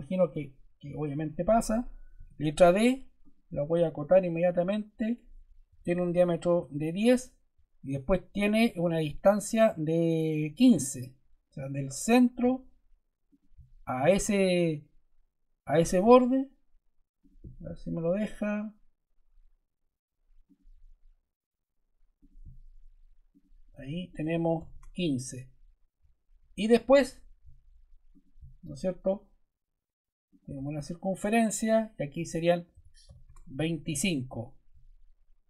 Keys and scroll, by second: 2.1 d, 5.4-6.3 typing, 6.5 Return, 24.2 1, 24.5 5, 24.6 Return, 32.6 2, 32.9 5, 33.2 Return.